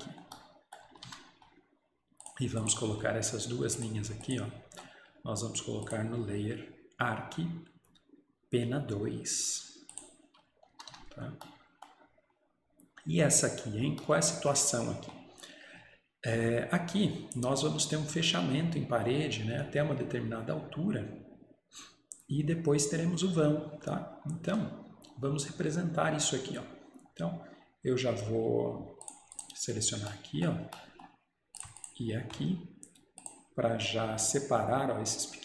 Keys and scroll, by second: 0.9 Escape, 1.1 Escape, 10.8 Escape, 11.0 Escape.